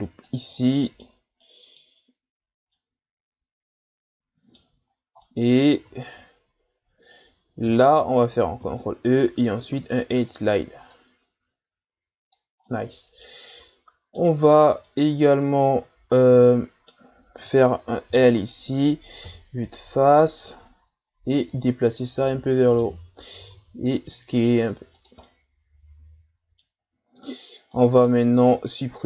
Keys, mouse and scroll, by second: 0.5-2.1 middle drag, 2.1-2.8 scroll up 2, 2.8-4.8 middle drag, 4.8-5.2 scroll up 2, 5.2 middle click, 6.0-6.6 scroll up 1, 6.6-7.5 scroll up 3, 7.5 scroll up 1, 7.7 alt+right click, 8.6 ctrl+e, 12.7-14.4 middle drag, 14.4-14.9 shift+scroll up 5, 14.9-17.5 middle drag, 17.5 right click, 18.1 l, 19.2 KP_1, 20.1-20.7 ctrl+scroll down 4, 21.5-23.5 drag, 23.5 s, 25.2-26.9 middle drag, 26.9-27.7 shift+scroll up 5, 27.7 middle click, 28.4 ctrl+Tab.